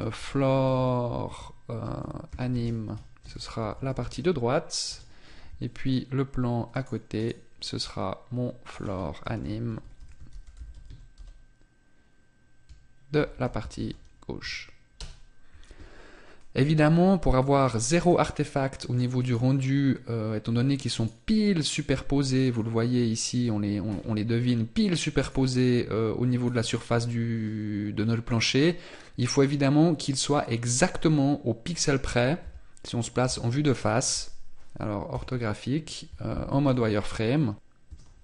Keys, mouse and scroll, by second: 0.6 o, 6.7 right click, 8.6 click, 9.8 o, 17.1 z, 17.7 middle click, 19.2 right click, 20.9 right click, 23.8 scroll up 1, 25.1 right click, 26.4 scroll down 1, 32.4 KP_1, 33.2 KP_5, 36.6 z.